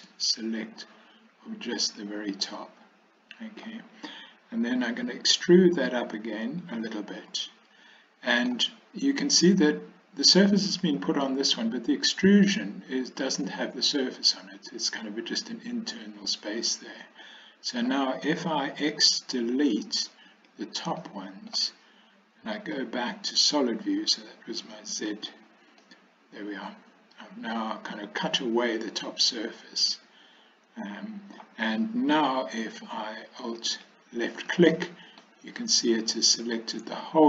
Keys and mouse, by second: 0.0 b, 2.5-3.7 middle drag, 4.9 e, 7.2-8.5 middle drag, 17.3-17.9 middle drag, 19.1 x, 21.1-21.6 middle drag, 22.9 z, 25.9-31.5 middle drag, 33.7 alt+click, 34.8 middle click.